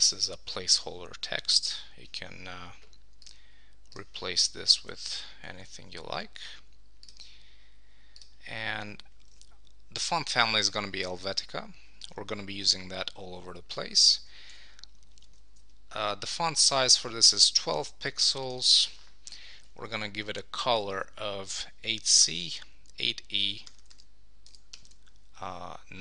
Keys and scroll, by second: 0.1 shift+Down, 1.4 shift+Left, 4.8 Left, 5.2 Down, 9.3 super+a, 13.3 Left, 14.5 shift+Down, 15.5 shift+Left.